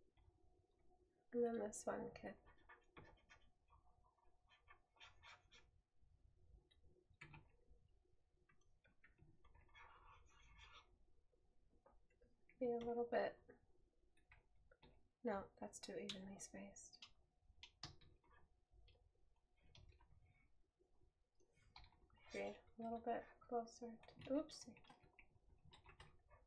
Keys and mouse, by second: 7.8 right click, 11.5 right click, 20.6 right click.